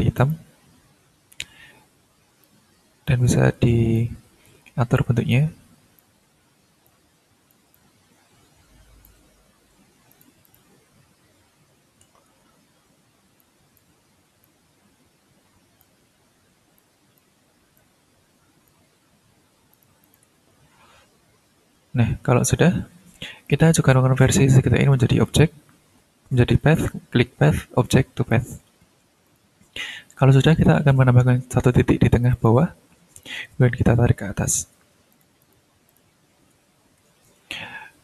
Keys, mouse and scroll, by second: 0.2 click, 2.4 click, 3.9-5.1 drag, 5.3 click, 6.8-7.7 ctrl+drag, 7.7-9.2 ctrl+drag, 10.1 shift+click, 10.4 ctrl+click, 10.7-11.0 ctrl+scroll down 2, 11.5-12.3 ctrl+scroll down 4, 12.5-12.9 ctrl+shift+scroll up 2, 13.4 ctrl+click, 14.4-16.0 drag, 16.7 click, 17.7-18.8 drag, 19.7 click, 20.3-21.1 ctrl+scroll down 3, 21.6-21.9 ctrl+scroll up 3, 22.1 ctrl+scroll down 2, 22.6-23.4 ctrl+scroll up 3, 23.4 click, 25.2 click, 27.8 click, 29.2 click, 29.9 ctrl+scroll up 1, 32.1 click, 33.2-34.7 ctrl+drag, 35.1 ctrl+click, 35.9 ctrl+click, 36.1-38.0 ctrl+scroll down 8.